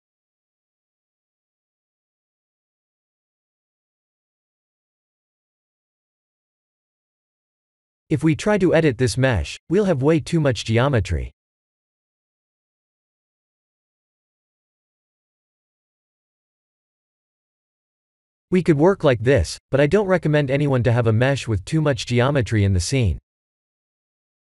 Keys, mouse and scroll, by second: 1.6 click, 2.0 click, 2.4 KP_1, 3.1 shift+z, 4.0 alt+shift+middle click, 5.1 shift+middle click, 9.9 Tab, 10.6 Tab, 11.6 Tab, 11.9 click, 12.4 Tab, 12.8 click, 13.3 shift+a, 17.9 Tab, 18.6 Tab, 19.0 click, 20.7 Tab, 24.2 ctrl+z.